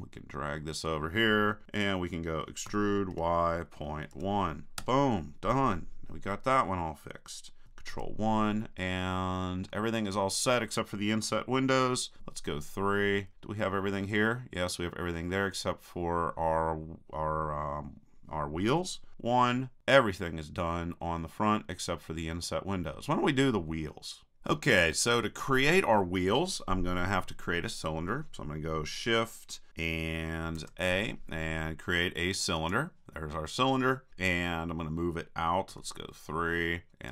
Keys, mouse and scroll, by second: 2.7 e, 7.9 ctrl+KP_1, 8.8 middle click, 12.2 KP_3, 19.1 KP_1, 30.6 shift+a, 35.8 KP_3.